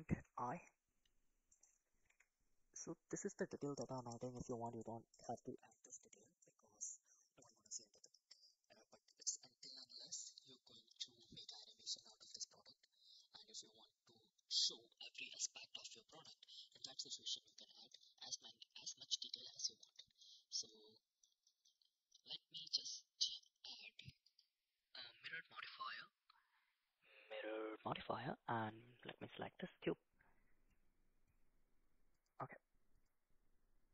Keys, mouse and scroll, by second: 0.2 i, 2.1 e, 4.2 Tab, 4.7 right click, 5.7 middle click, 6.4-7.4 middle drag, 10.6 KP_7, 11.1 shift+z, 12.0 g, 17.0 shift+z, 17.5 middle click, 18.2 middle click, 20.0 shift+middle click, 20.7 middle click, 21.5 shift+middle click, 22.7 click, 24.3-27.8 drag, 29.1 click, 30.7 middle click, 32.1 click.